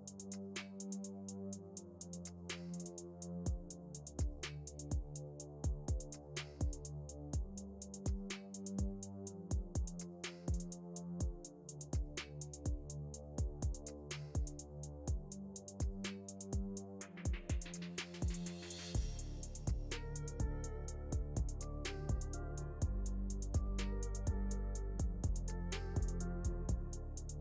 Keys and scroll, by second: 4.6 KP_Add, 15.0 ctrl+z.